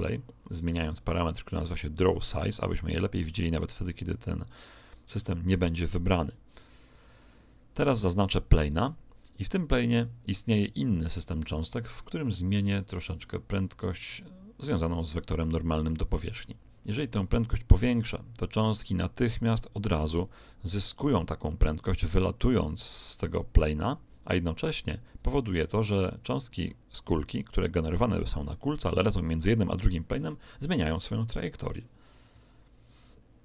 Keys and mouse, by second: 0.8-5.6 drag, 5.9-8.1 drag, 8.6 right click, 12.2-15.2 middle drag, 17.4 click, 27.6 right click, 31.0-32.8 middle drag, 32.2 KP_1.